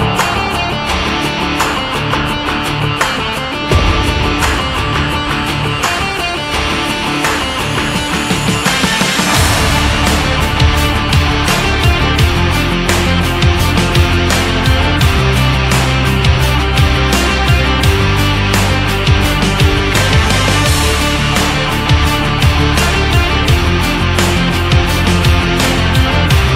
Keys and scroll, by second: 1.2 Up, 2.7 Left, 3.5 ctrl+z, 25.3 Down.